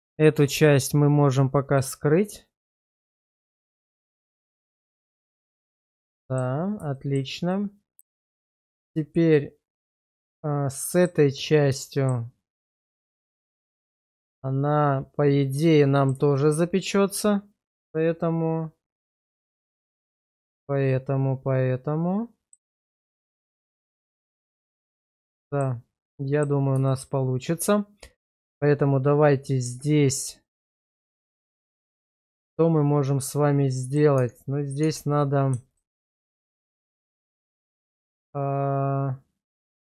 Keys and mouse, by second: 3.0-3.8 middle drag, 4.0 shift+middle drag, 4.4-5.7 middle drag, 6.2 shift+middle click, 6.9 shift+middle click, 7.5 middle click, 8.2 shift+middle click, 9.0-11.0 middle drag, 11.9 shift+middle click, 13.5 shift+middle drag, 13.9-16.1 middle drag, 16.3 shift+middle drag, 19.8-22.5 middle drag, 23.1 shift+middle drag, 23.5-25.2 middle drag, 25.4 shift+middle drag, 26.1-26.4 middle drag, 26.9 shift+middle click, 29.6 Tab, 30.9 shift+middle click, 31.4-34.0 middle drag, 34.2 Tab, 34.8 Tab, 37.1 alt+shift+click, 37.8-39.8 middle drag.